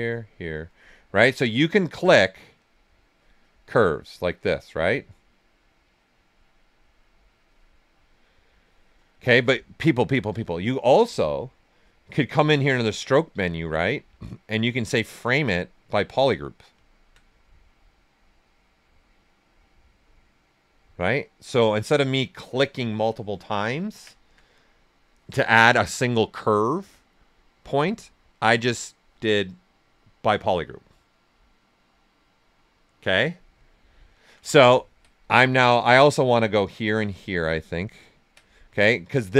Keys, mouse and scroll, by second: 0.7 right click, 3.0 click, 9.1 alt+right click, 10.9 click, 16.8 alt+right click, 17.3 right click, 18.2-20.7 right drag, 23.2 alt+right click, 33.6 alt+right click, 33.6 typing, 33.8 alt+right click, 34.5-35.8 ctrl+right drag, 35.8 click, 37.3 ctrl+right click, 39.2 right click.